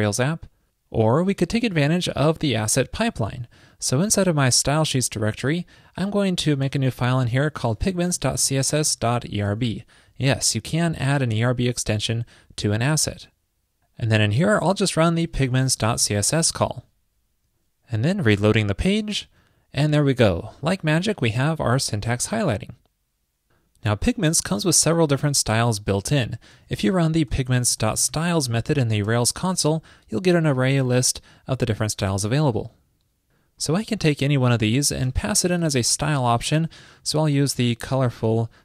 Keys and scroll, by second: 6.8 super+a, 14.6 ctrl+shift+>, 16.5 super+s, 37.5 super+v, 38.3 super+s.